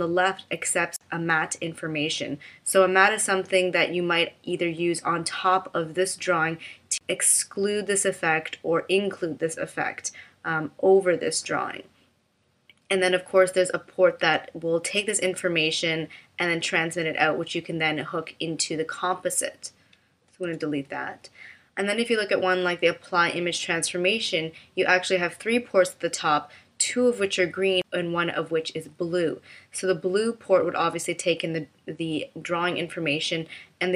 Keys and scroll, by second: 20.5 BackSpace.